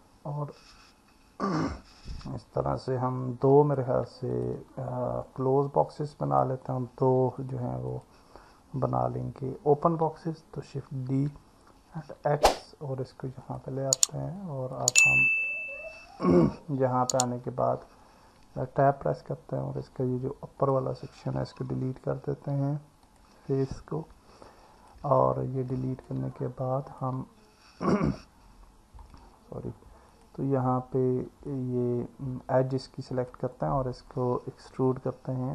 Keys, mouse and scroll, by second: 2.9 click, 4.3 shift+click, 7.4 click, 10.9 shift+d, 12.0 x, 14.4 click, 16.0 click, 18.7 Tab, 20.6 click, 22.1 Delete, 24.5 alt+middle click, 25.7 click, 26.3 alt+middle click, 29.0 click, 31.5-33.4 alt+middle drag, 35.0 e.